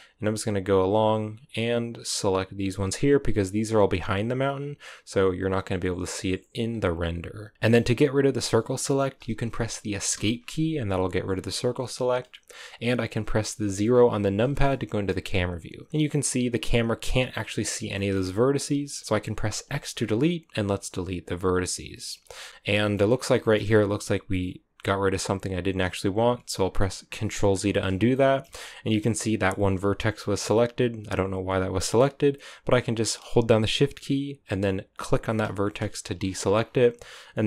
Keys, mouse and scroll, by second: 13.5 KP_0, 14.5 shift+middle click, 15.1-16.9 scroll up 3, 16.9 z, 17.5-17.9 scroll down 1, 17.9-20.9 shift+middle drag, 20.9 x, 22.6 shift+middle click, 23.0-27.1 scroll up 7, 23.3 shift+middle click, 27.1 ctrl+z, 28.0 shift+middle click, 28.4-35.0 scroll up 7, 35.0-36.1 shift+right drag, 36.1-37.4 scroll down 14.